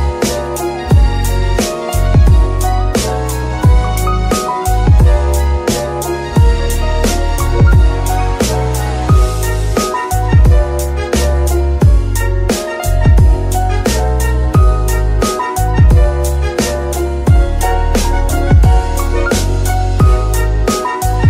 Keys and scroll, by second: 6.6 g, 8.1 shift+g, 12.1 s, 12.9 Escape, 15.1 s, 15.6 Escape, 17.0 shift+s, 20.1 s.